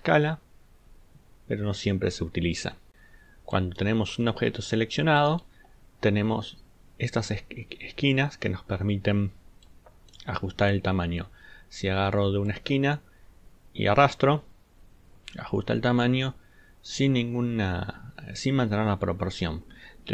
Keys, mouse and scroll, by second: 4.4 ctrl+scroll up 2, 5.1 ctrl+click.